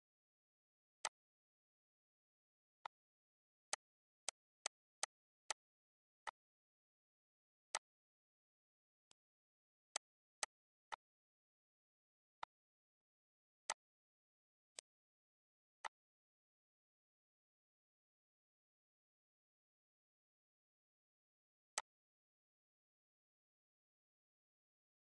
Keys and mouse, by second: 1.5 click, 2.5 shift+click, 4.8 click, 6.5 click, 8.1 click, 9.0 click, 11.5 click, 11.8 Delete, 12.1 click, 12.2 Delete, 12.7 click, 13.0 Delete, 13.8 click, 14.1 Delete, 14.8 click, 15.0 Delete, 16.1 ctrl+s, 20.8 click.